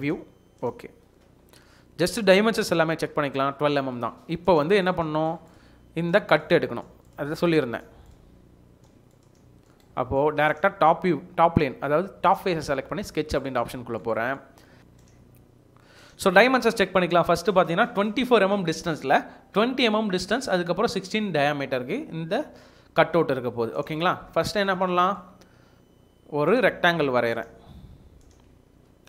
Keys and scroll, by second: 14.8 space, 28.5 Escape, 28.7 Escape.